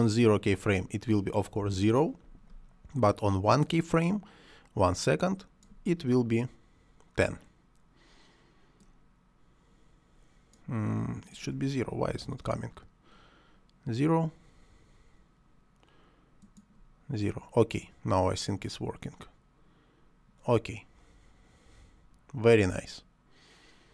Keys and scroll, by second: 1.6 0, 1.7 Return, 12.1 0, 12.2 Return.